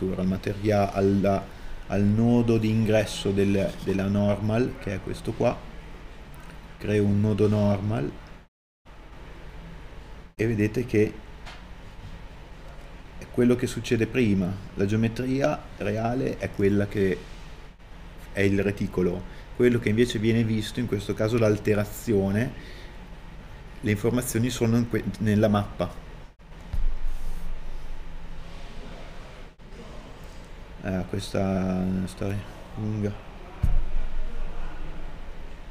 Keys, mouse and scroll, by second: 28.4 t, 29.7 middle click.